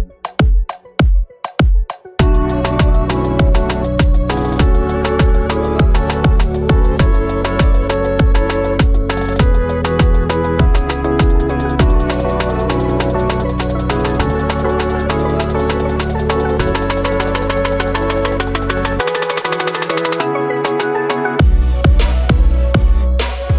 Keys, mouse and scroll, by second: 0.7 scroll down 2, 2.2 scroll up 1, 3.0 click, 3.1 double click, 3.5-4.8 typing, 5.3 Return, 6.3 click, 7.9 scroll down 3, 8.2 alt+drag, 9.5 scroll down 2, 9.8 alt+click, 10.7 alt+middle click, 11.1-11.6 alt+drag, 12.9 alt+click, 14.6 click, 15.2-16.4 drag, 17.3 click, 19.4 click, 20.1 click, 22.1 click, 22.9 click, 23.4 click.